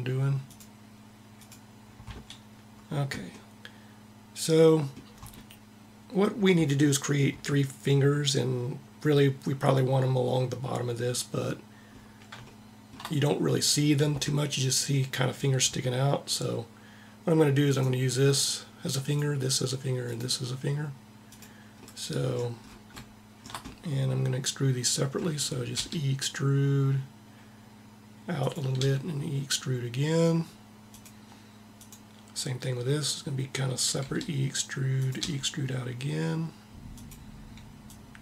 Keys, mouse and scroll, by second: 1.1-3.0 drag, 25.4 e, 28.0 click, 28.5 e, 33.8 e, 34.9 e, 37.5-38.2 drag.